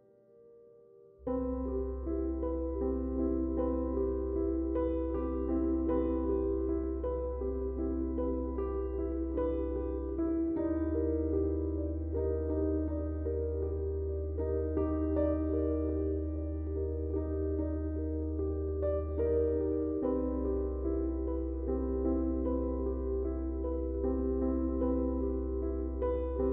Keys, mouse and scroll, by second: 0.6 click, 2.3-5.3 drag, 10.1 typing, 11.5-14.4 drag, 14.4 click, 19.7-21.9 drag, 21.9 typing, 23.4 ctrl+z, 24.8 click.